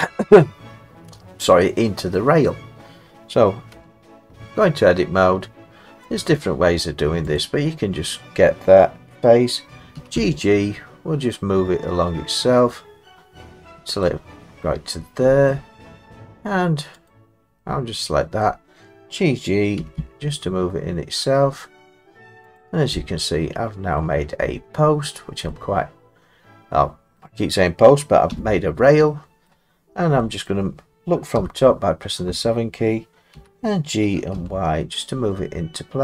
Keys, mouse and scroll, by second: 2.5 middle click, 3.7 Tab, 6.2 click, 7.4 click, 10.0 g, 10.1 g, 14.1 click, 15.5 middle click, 17.1 click, 18.4 middle click, 19.8 g, 20.0 g, 22.6 click, 24.0-26.4 scroll, 27.2-28.0 scroll, 28.3 Tab, 28.9 scroll, 28.9 middle click, 29.5 middle click, 30.5 middle click, 31.4 7, 33.3 g, 34.3 y.